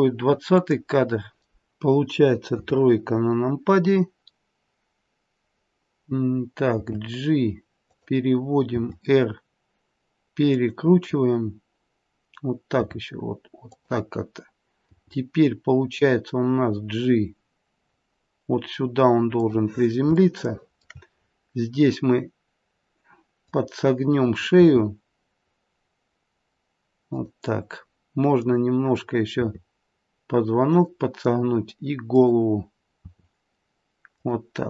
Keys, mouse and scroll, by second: 0.5 click, 2.5 KP_3, 6.8 g, 8.7 r, 12.7 r, 14.9 g, 20.1 shift+middle click, 21.1-23.1 scroll up 1, 23.1 scroll up 3, 23.4 click, 24.5 r, 28.4 click, 29.3 r, 32.1 click, 33.0 r.